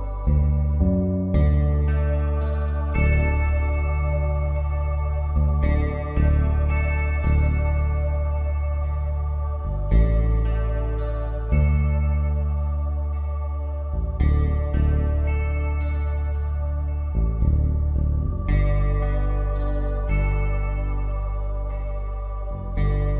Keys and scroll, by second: 5.3 ctrl+shift+t, 7.5 ctrl+d, 8.2 space, 9.5 v, 16.6 Down.